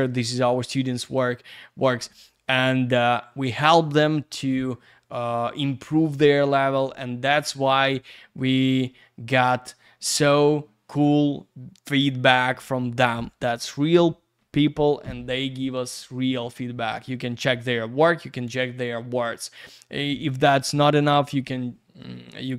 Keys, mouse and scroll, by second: 7.6-7.9 scroll down 1.